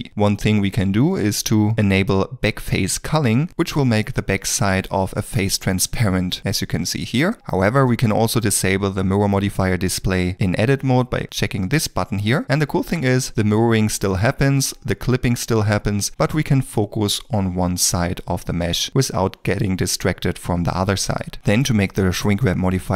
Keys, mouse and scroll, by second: 5.4 middle click, 12.4 2, 12.8 middle click, 13.3 e, 15.6 middle click.